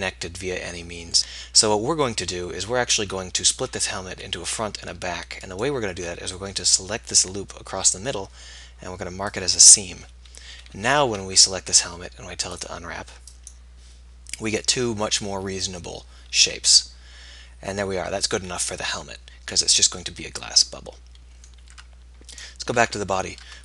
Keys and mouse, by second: 10.6 a, 10.8 a, 18.6-19.6 middle drag, 22.0 Tab, 22.4-23.6 right drag, 22.8 Tab.